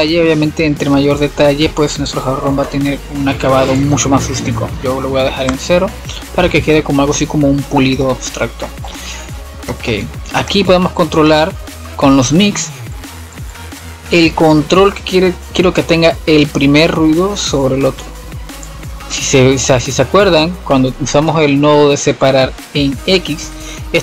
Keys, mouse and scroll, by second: 2.1-2.9 drag, 2.9 scroll up 6, 3.2-4.2 middle drag, 4.2-7.4 drag, 8.2-18.5 drag, 18.5-20.6 middle drag, 20.6-21.1 scroll down 1, 21.1-23.7 middle drag, 23.7-24.0 drag.